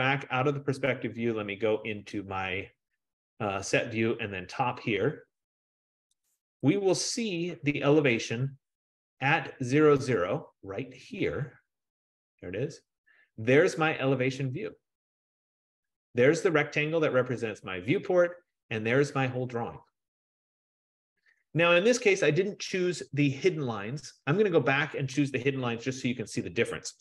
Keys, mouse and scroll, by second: 0.3 click, 4.2 click, 6.4 click, 6.6 click, 7.4-10.4 scroll, 10.8-11.8 scroll, 13.0-14.4 scroll, 16.4-17.8 middle drag, 18.4 middle click, 18.4-19.4 scroll, 23.2 scroll, 24.6-25.4 scroll.